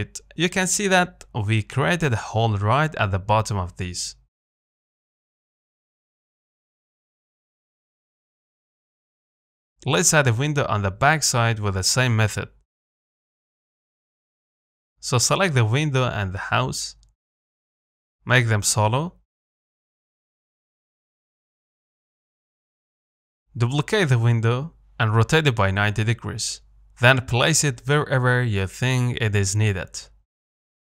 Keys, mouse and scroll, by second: 0.0 scroll down 2, 0.3 middle click, 0.8-3.4 scroll up 2, 4.6 shift+middle click, 4.6-4.9 scroll up 1, 4.9-7.4 middle drag, 7.4-7.8 scroll up 1, 7.8 shift+middle click, 8.2-8.7 scroll down 1, 8.7 middle click, 8.7 scroll up 1, 9.0-11.1 middle drag, 11.1-11.5 scroll up 2, 11.5 middle click, 11.7 z, 12.9 click, 13.3 scroll down 1, 13.6-15.0 middle drag, 15.0 ctrl+click, 15.6-16.9 middle drag, 16.9 z, 17.7 shift+click, 18.2 middle click, 19.1 KP_Divide, 20.4 KP_7, 21.8 z, 22.7 click, 23.6 shift+d, 25.1 r, 27.9 z, 28.0-29.2 middle drag, 29.2 KP_1.